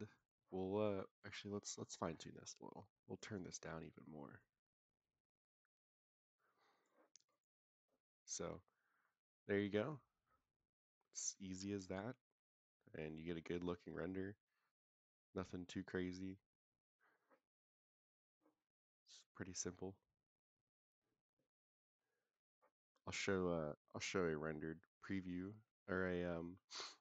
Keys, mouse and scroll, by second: 0.1 click, 1.0 click, 1.6-3.0 scroll up 5, 1.7 middle click, 3.0 click, 3.0 scroll up 1, 7.2 click, 8.0-8.3 scroll up 3, 9.0 scroll down 1, 11.4 scroll down 2, 22.8-23.5 middle drag, 26.0-26.5 middle drag, 26.9 KP_0.